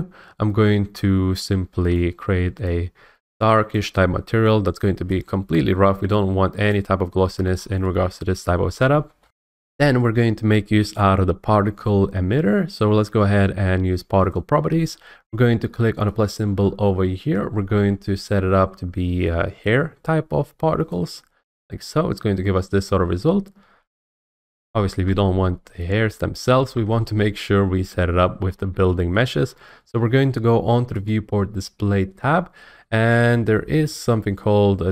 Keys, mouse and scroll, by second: 1.9 click, 3.7 click, 6.7 click, 7.1-8.5 scroll down 2, 7.6-8.5 scroll up 2, 8.5 scroll down 1, 9.2 F8, 14.3 click, 16.2 click, 20.9 click, 24.0 F8, 24.1 click, 28.4-28.7 scroll, 29.1 shift+middle click, 31.1 click.